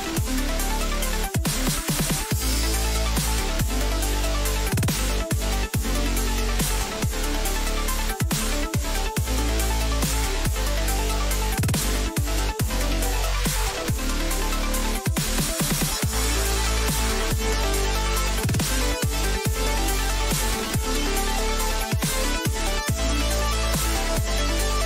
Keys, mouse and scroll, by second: 0.0 middle click, 0.3-2.5 drag, 1.2-3.5 right drag, 2.5 Delete, 4.8-7.4 middle drag, 7.4-9.5 right drag, 9.5 Delete, 11.8 a, 13.7-15.8 middle drag, 16.3-17.8 middle drag, 18.2 z, 20.0 Tab, 20.7 Tab, 21.5 a, 21.8 a, 23.1-24.8 drag.